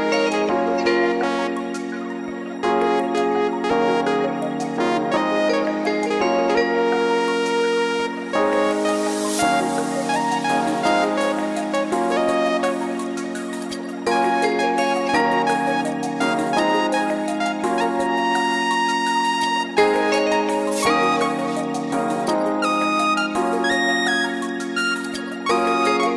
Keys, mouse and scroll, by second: 1.1 scroll down 1, 1.3 middle click, 2.0-2.5 scroll up 2, 2.6 scroll up 1, 2.9 middle click, 3.8 click, 4.4 middle click, 5.3 g, 11.6 middle click, 12.7-13.8 scroll up 3, 13.8 KP_7, 14.9 click, 15.8 click, 16.9 alt+click, 17.2 alt+click, 17.8 alt+shift+click, 18.3 alt+shift+click, 19.2 ctrl+z, 20.1 alt+shift+click, 21.0 ctrl+z, 22.1 alt+shift+click, 22.9 alt+shift+click, 23.7 ctrl+z, 24.7 alt+shift+click, 25.6 alt+shift+click.